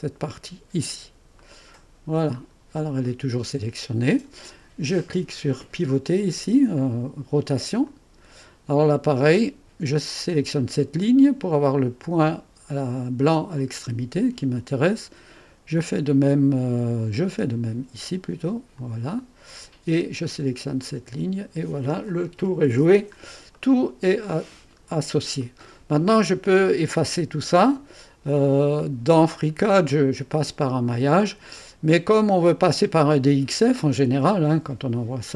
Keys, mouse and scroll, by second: 1.3 middle click, 2.2 right click, 2.4-3.0 scroll down 2, 7.8 click, 13.5 click, 18.7 click, 20.8 click, 21.4 click, 22.0 click, 23.1-23.5 scroll up 1, 23.5-24.8 right drag, 24.8-25.4 scroll up 1, 25.4 right click, 29.6 scroll down 2, 31.1 scroll down 2, 31.6-33.0 right drag.